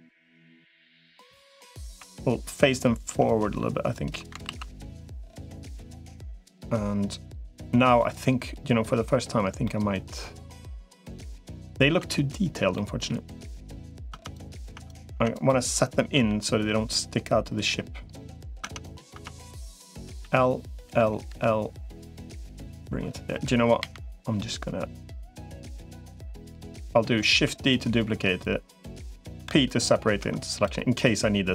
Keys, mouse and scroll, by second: 0.2 click, 1.8 KP_7, 3.0 r, 4.4 ctrl+s, 9.4-11.4 middle drag, 11.8 Tab, 12.5 middle click, 14.0 Tab, 14.2 click, 14.4 Tab, 15.0 Tab, 15.2 click, 16.0 l, 16.8-18.0 drag, 18.4 Tab, 19.0 Tab, 19.2 click, 20.0 l, 20.6 l, 21.2 l, 22.0 click, 23.6 KP_7, 25.2 click, 27.2 shift+d, 28.2 click, 29.2 p, 30.0 Tab.